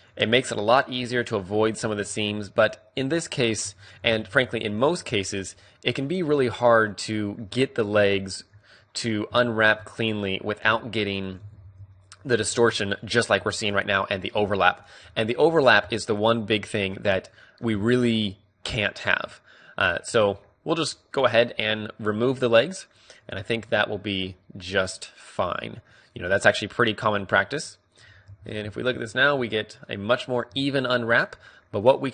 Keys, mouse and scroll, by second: 0.2-1.4 middle drag, 1.4-3.1 drag, 1.8 ctrl+e, 2.9 a, 3.6 a, 3.9 u, 6.5 middle click, 7.5 a, 8.3-9.8 middle drag, 10.0-11.2 middle drag, 11.5 ctrl+e, 12.0-13.1 drag, 12.3 a, 12.5 a, 13.3 u, 16.5-26.8 middle drag, 27.2 middle click, 28.0 KP_3, 28.1-32.1 middle drag, 28.2 Tab, 30.5 Tab.